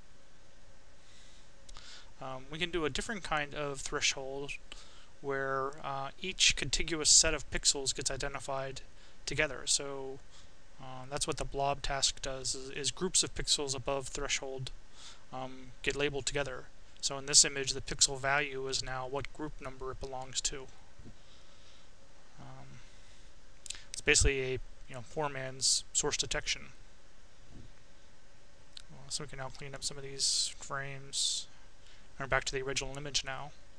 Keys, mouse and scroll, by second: 0.0 click, 0.9 Delete, 4.0 click, 5.5-6.5 drag, 7.1 click, 9.3 click, 10.5 click, 12.7 click, 14.3 click, 15.1-19.1 right drag, 19.3 shift+Tab, 20.3 shift+Tab, 21.1 shift+Tab, 24.7 click, 26.5 click, 28.9 click, 31.0 click.